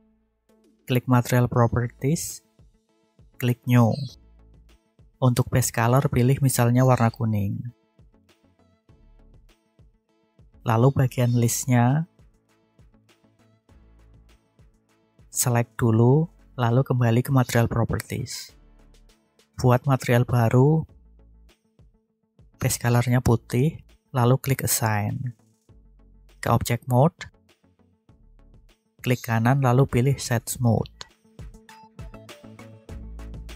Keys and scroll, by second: 10.0 alt+a, 26.9 Tab.